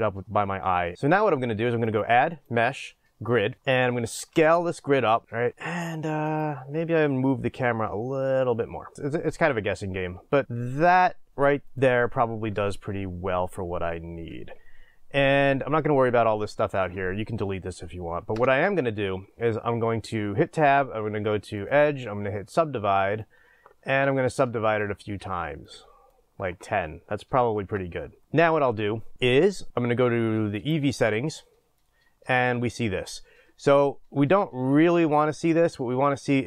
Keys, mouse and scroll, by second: 0.9 click, 3.4-6.4 drag, 4.2 s, 8.2-10.4 middle drag, 8.9 s, 10.4 click, 10.6 s, 11.8 click, 18.5 Tab, 23.2-28.2 drag, 27.7 Tab, 31.1 click.